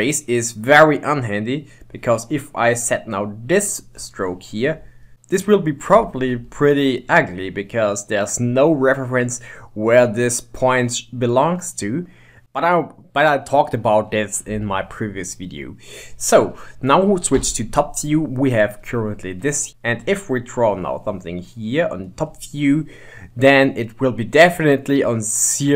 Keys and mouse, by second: 0.0-1.7 middle drag, 1.7-4.7 drag, 4.7 middle click, 7.7-9.5 middle drag, 10.8-12.6 middle drag, 12.8-14.3 middle drag, 17.5 KP_7, 19.7 ctrl+z, 20.0-23.0 drag, 24.5-25.7 middle drag.